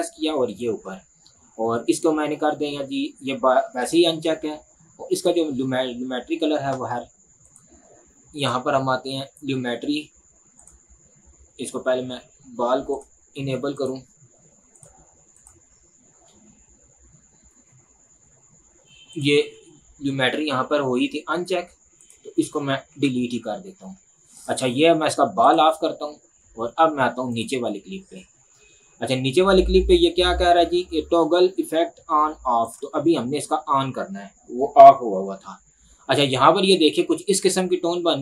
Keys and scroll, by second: 23.0 Delete.